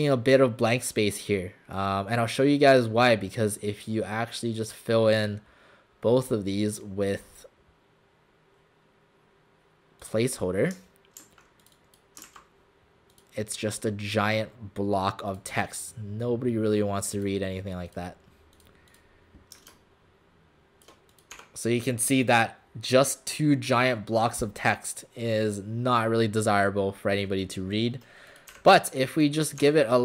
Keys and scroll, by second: 11.2 ctrl+a, 12.3 ctrl+a, 21.3 alt+shift+w, 28.5 Delete, 29.6 w.